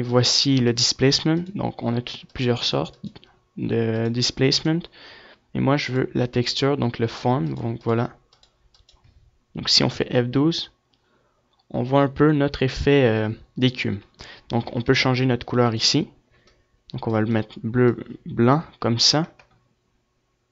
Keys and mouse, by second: 0.0-9.1 drag, 13.2 F11, 14.9-16.3 drag.